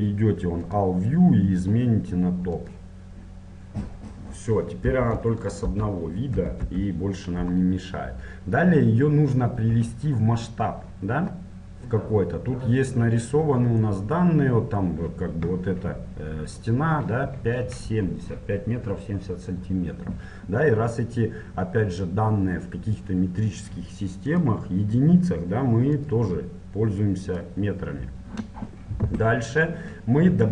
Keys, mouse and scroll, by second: 0.8-2.7 drag, 4.0-6.6 middle drag, 4.9 KP_1, 5.7 KP_Enter, 6.4 KP_1, 6.8 KP_7, 7.7 middle click, 8.4 middle click, 22.0-23.8 drag, 24.4-27.9 drag, 29.4-30.5 middle drag.